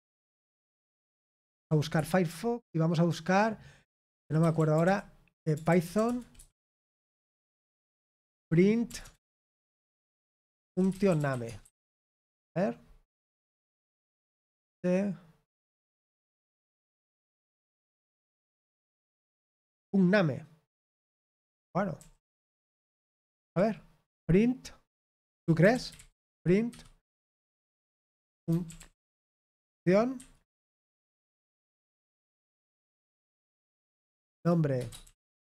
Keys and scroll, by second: 0.9 typing, 7.0-12.5 typing, 21.4 super+h, 21.9 j, 26.6 typing, 27.8-29.2 typing, 33.9-35.4 typing.